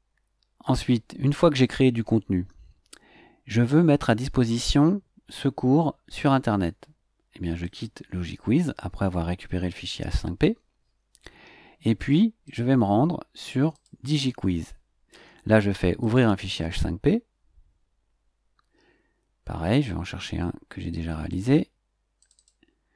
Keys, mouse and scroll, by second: 0.0 scroll up 2, 7.6 click, 12.4 click, 13.7 click, 16.0 click, 19.9 scroll up 2, 20.5 scroll up 1, 21.2 click, 22.2 click.